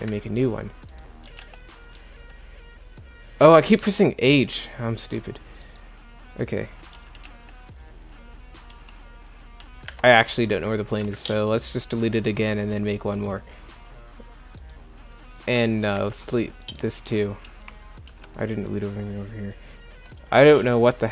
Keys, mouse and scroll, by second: 1.3 h, 1.4 z, 2.0 h, 6.9 g, 7.2 z, 8.7 g, 10.0 Escape, 11.0 Delete, 14.4 Delete, 15.9 Delete, 17.5 2, 18.1 1.